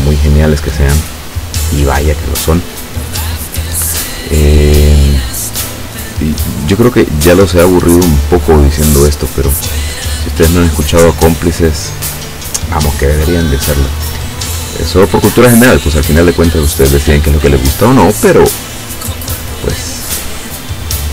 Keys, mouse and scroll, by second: 1.2 click, 6.1 click, 7.9 click, 10.3 click, 11.3 click, 17.1 click.